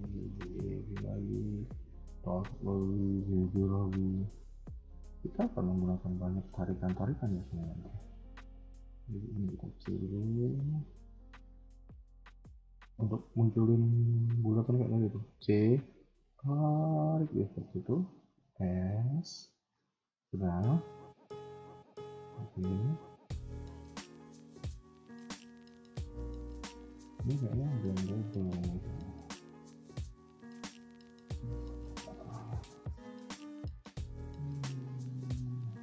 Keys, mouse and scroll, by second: 1.6 click, 1.6 g, 1.8 g, 3.0 click, 3.1 g, 4.2 scroll down 2, 4.5 middle click, 5.1 KP_1, 5.6 middle click, 7.0 alt+click, 7.9 middle click, 8.9 click, 9.5 c, 12.1 a, 12.5 a, 13.7-15.0 scroll up 1, 15.0 c, 17.4-18.0 scroll down 3, 18.3 s, 20.5 middle click, 21.6 KP_1, 21.9 middle click, 22.6-23.7 scroll up 2, 24.6 KP_1, 24.8-25.7 scroll down 6, 25.7 shift+middle click, 26.0-26.3 scroll up 2, 27.0 middle click, 27.6 shift+middle click, 28.0 middle click, 28.2-28.6 scroll up 2, 28.6 a, 28.7 a, 29.0 click, 29.4-29.8 scroll up 3, 29.8 x, 31.8 ctrl+z, 32.8 scroll up 1, 33.1 a, 33.2 a, 33.4 scroll down 1, 33.6 middle click.